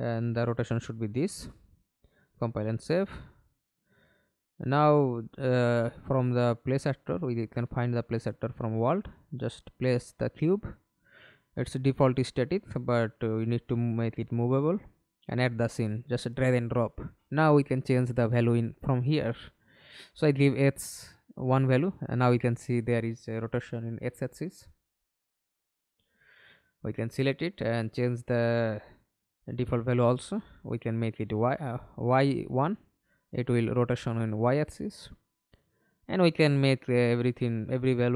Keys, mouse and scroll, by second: 0.4 right click, 2.1 right click, 8.9 middle click, 13.5 middle click, 14.2 ctrl+space, 18.8 1, 19.1 Return, 20.9 middle click, 22.3 alt+p, 25.7 Escape, 29.5 0, 29.8 Return, 31.6 1, 32.5 middle click, 33.3 alt+p, 35.0 Escape.